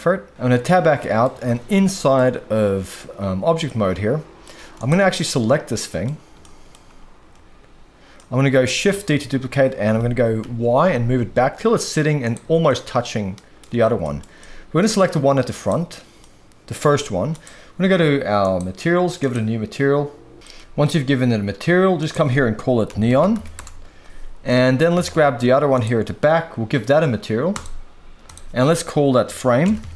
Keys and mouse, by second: 0.3 Tab, 0.3 x, 0.6-1.2 middle drag, 1.4 alt+a, 1.8-2.1 shift+middle drag, 3.6-4.4 middle drag, 4.8 click, 5.2-6.0 middle drag, 6.4-6.7 shift+middle drag, 8.1-8.6 middle drag, 9.1 shift+d, 10.4 y, 12.2 shift+click, 12.6-13.6 middle drag, 14.0 shift+middle drag, 14.4-14.8 middle drag, 15.5 click, 16.2-16.7 middle drag, 16.9 g, 18.4 click, 19.2 click, 20.4 middle click, 22.0-23.6 drag, 24.5 middle click, 25.0 alt+a, 25.8 click, 27.5 click, 28.2-29.9 drag.